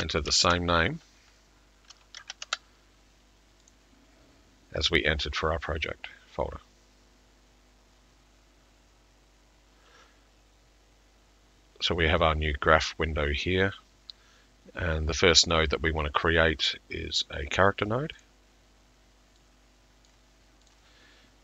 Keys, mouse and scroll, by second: 0.0-0.6 typing, 3.5-4.2 typing, 3.7 click, 18.2 middle click, 18.2 click, 20.1 click.